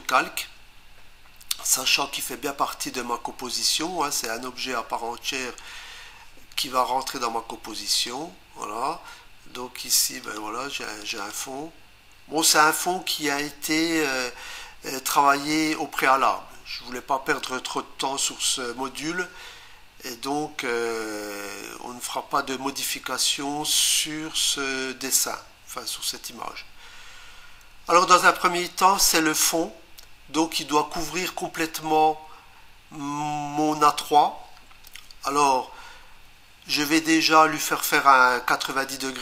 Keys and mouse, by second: 7.9 click, 10.2 click, 11.0 click, 11.2 click.